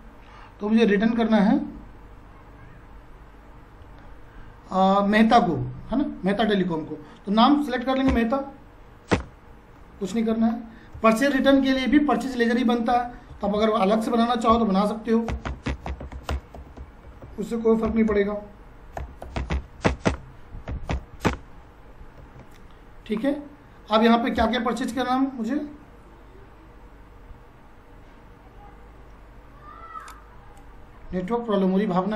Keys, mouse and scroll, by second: 6.3 click, 8.1 m, 9.1 Return, 10.3 ctrl+a, 13.3 ctrl+a, 13.4 alt+c, 14.5-21.4 typing, 22.2 ctrl+a, 24.3 space, 30.0-32.1 drag.